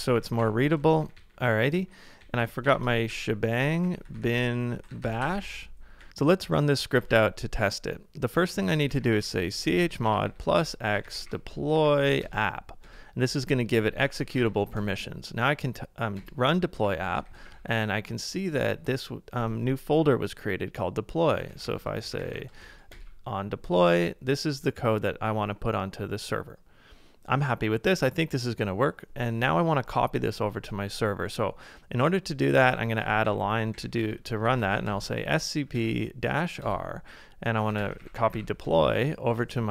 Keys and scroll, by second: 0.0-9.6 typing, 11.5-12.2 typing, 12.3 Tab, 12.8 Return, 13.7-14.8 typing, 16.1 Return, 16.6-18.0 typing, 18.6 Return, 21.3-22.7 typing, 32.7 ctrl+a, 32.8-34.0 typing, 35.4-38.8 typing.